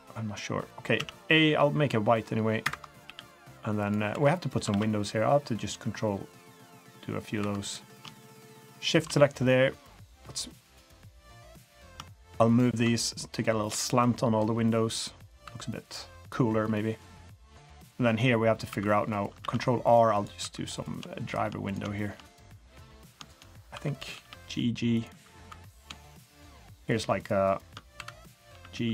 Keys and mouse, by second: 0.7 middle click, 1.0 a, 1.5 b, 3.0 g, 4.1 3, 4.7 ctrl+r, 7.0 click, 7.4 2, 7.6 click, 8.8 ctrl+shift+click, 10.5 click, 12.5 ctrl+shift+drag, 13.7-15.3 drag, 15.5 2, 15.8 click, 16.6 click, 16.8 middle click, 18.7 3, 19.4 ctrl+r, 20.4 3, 20.7 click, 21.6 click, 22.4 middle click, 23.7 1, 24.1 g, 25.4 3, 25.7 click, 26.6 shift+click, 26.9 shift+click, 27.9 2, 28.6 g.